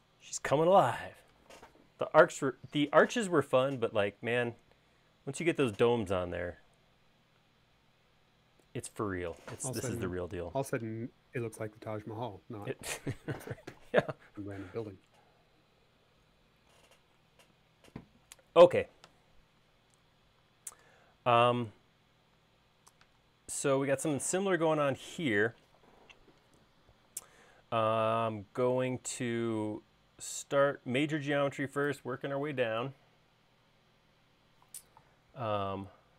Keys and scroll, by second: 27.3 l.